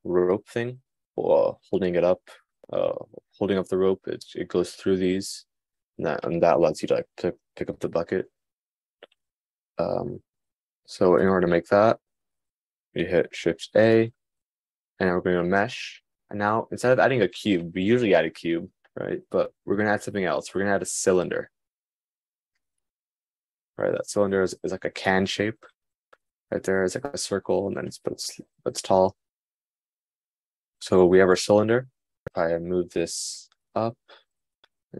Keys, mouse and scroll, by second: 14.5 shift+a.